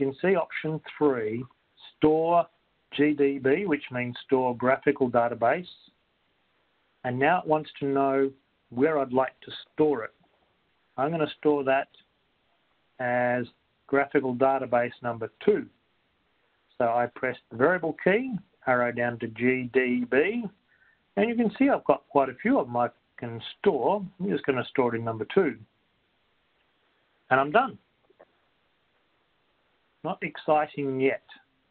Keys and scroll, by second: 6.4 3, 13.2 Right, 18.8 Down, 21.9 Return, 25.4 2, 26.4 Return.